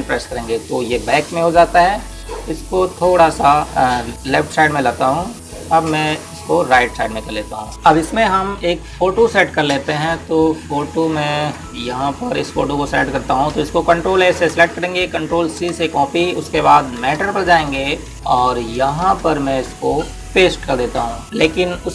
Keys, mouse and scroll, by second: 1.2 [, 7.1 click, 11.6 click, 15.2-16.6 typing, 17.8 Tab, 20.9 click.